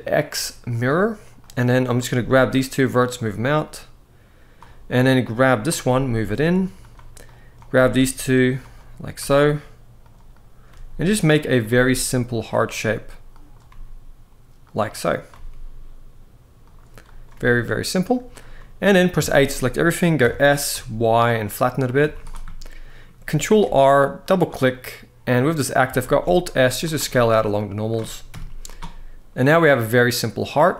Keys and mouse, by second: 0.4 click, 1.1 click, 1.9 g, 2.7 click, 3.4 click, 4.7 click, 5.6 g, 6.5 click, 6.9 click, 7.4 g, 8.6 click, 10.0 click, 10.0 g, 11.0 click, 11.0 g, 11.4 g, 12.1 click, 13.4 g, 14.4 click, 14.7 click, 15.0 g, 16.3 click, 16.9 click, 18.1 g, 18.3 middle click, 18.9 a, 19.2 middle click, 20.0 s, 20.5 y, 21.8 z, 22.2 middle click, 23.2 ctrl+r, 24.1 click, 24.5 middle click, 25.8 alt+s, 26.6 click, 26.9 middle click, 28.1 KP_1, 30.5 z.